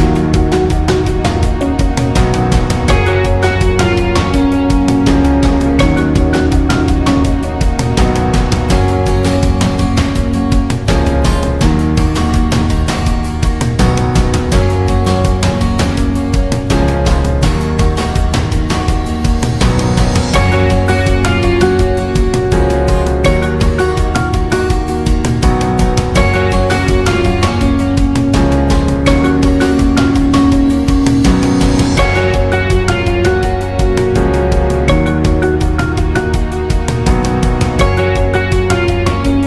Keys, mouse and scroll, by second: 8.3 click, 8.9 alt+scroll up 1, 9.1 space, 9.2 click, 9.9 alt+scroll down 1, 10.1 space, 10.2 click, 10.5 space, 11.4 click, 12.8 l, 13.8 click, 15.5 v, 16.1 click, 18.3 i, 21.2 v, 21.9 click, 22.5 i, 23.9 click, 24.1 v, 25.0 click, 27.1 i, 27.6 click, 27.7 v, 28.4 click, 30.2 alt+scroll down 1, 30.4 space, 30.6 click, 31.4 space, 31.9 alt+scroll down 1, 32.1 space, 32.3 click, 32.6 space, 33.2 alt+scroll up 1, 35.1 alt+scroll up 1, 35.3 space, 35.6-38.4 drag.